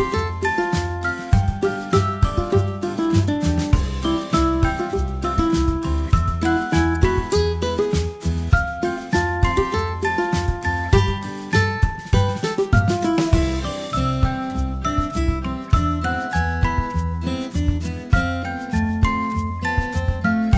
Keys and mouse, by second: 0.3 ctrl+z, 0.6 ctrl+z, 1.2 ctrl+z, 1.7 a, 2.1 a, 4.2 ctrl+alt+s, 9.5-11.0 middle drag, 11.0 a, 11.5 z, 11.8 b, 12.4 z, 13.5 click, 14.8 ctrl+alt+s, 17.5 a.